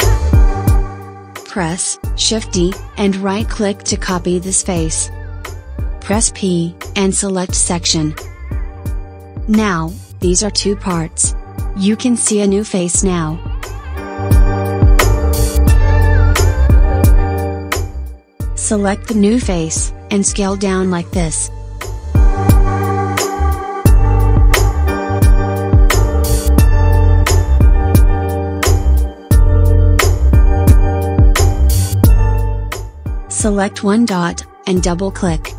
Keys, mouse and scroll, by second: 2.0 shift+d, 6.0 p, 9.1 Tab, 11.0 click, 14.0 click, 16.0 click, 16.8 click, 17.7 click, 22.1 s, 28.7 Tab, 34.1 click.